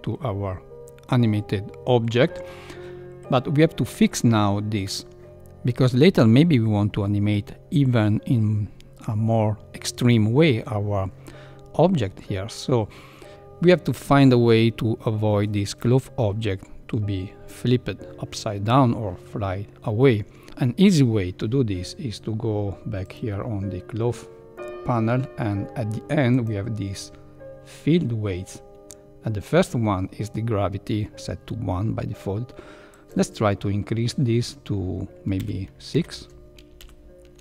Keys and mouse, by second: 23.0-23.5 drag, 26.3 click, 32.9 click, 36.9 shift+Left, 37.0-37.4 shift+drag.